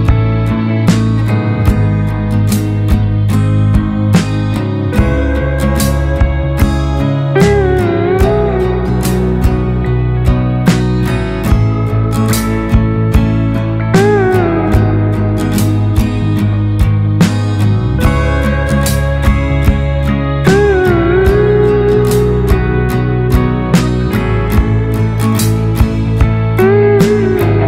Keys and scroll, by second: 0.7-2.9 typing, 3.1 Return, 20.7 Right, 20.8 Right, 20.9 Right, 21.1 Right, 23.4 Down, 23.7 Down, 24.2 Down, 24.2 Down, 25.4 Left.